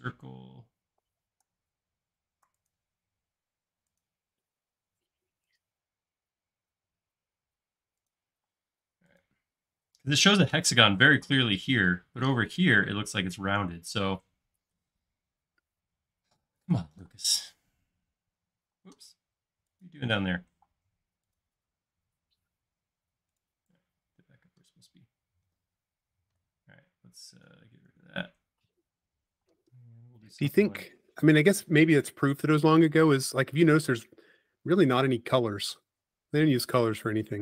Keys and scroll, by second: 8.5 space, 17.1 p, 18.8 space, 20.6 m, 22.0 Up, 23.8 space, 28.0 x, 29.1-29.9 typing, 33.4 space, 36.7 space.